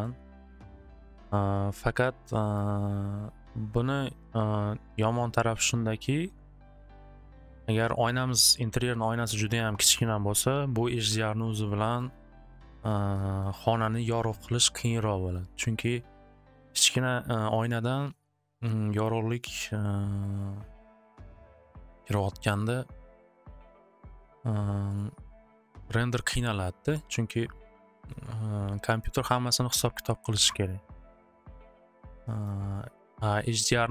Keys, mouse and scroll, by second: 0.0 click, 2.5 click, 6.4 click, 9.0-10.1 drag, 12.1-15.0 drag, 16.3 click, 27.1 click, 28.5-29.9 drag, 32.4 click, 33.8 click.